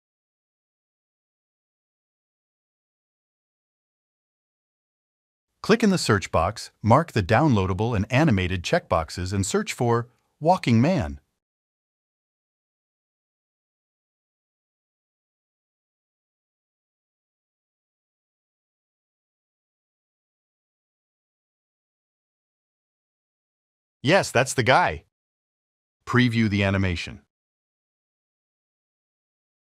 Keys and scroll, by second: 0.0-2.0 typing, 2.7 Return, 10.8-13.6 typing.